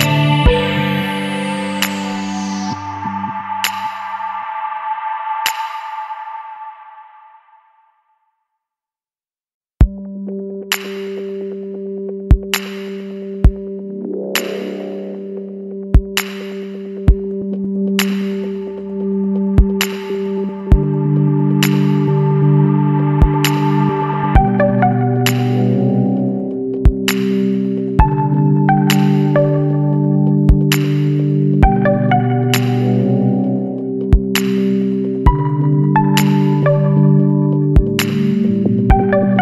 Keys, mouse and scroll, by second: 1.0 scroll down 2, 3.3 click, 6.1 click, 7.4 click, 9.8 click, 11.7 click, 13.3 click, 16.3 KP_5, 17.1 KP_Enter, 18.7 scroll up 2, 21.7-23.1 drag, 24.0 click, 24.5 Down, 24.8 Up, 30.3 click, 32.5 click, 33.7 click, 34.4 click, 36.5 click, 38.0 click, 39.3 KP_7.